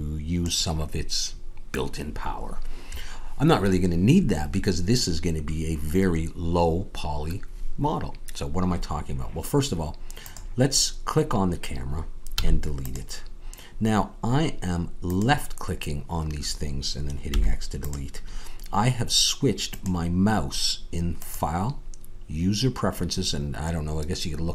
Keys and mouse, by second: 12.0 click, 12.3 x, 15.8-17.3 drag, 17.3 x, 20.8-24.5 drag.